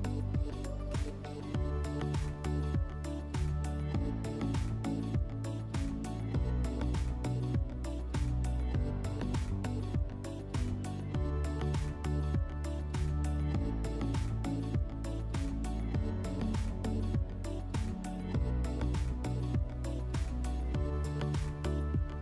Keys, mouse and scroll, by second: 0.8 alt+middle click, 2.3 alt+middle click, 3.6 ctrl+click, 5.1 alt+middle click, 6.5 ctrl+click, 6.6 ctrl+click, 7.5 ctrl+click, 10.0 alt+middle click, 11.3 alt+middle click, 12.5 middle click, 15.1 click, 17.3 click, 18.0 click, 19.5 click, 20.5 click, 20.6 click, 21.5 3.